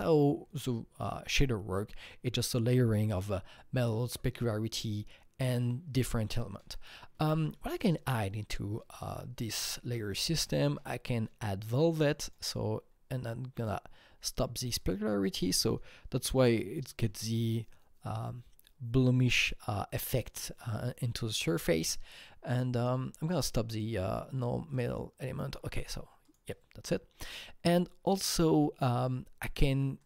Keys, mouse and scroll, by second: 11.6-14.8 drag, 11.6-12.0 scroll up 1, 14.8-17.5 drag, 22.7 click, 23.7 click, 24.7 click, 26.9-27.5 scroll down 1, 27.5-27.9 scroll down 3, 29.9 scroll down 1.